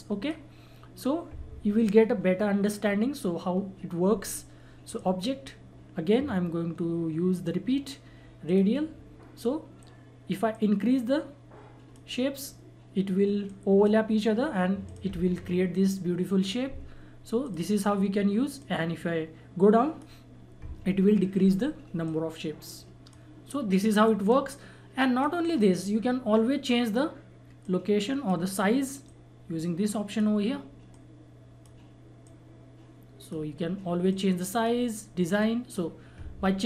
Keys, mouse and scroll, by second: 4.8 click, 6.3 click, 8.4-14.8 drag, 17.4-36.6 drag.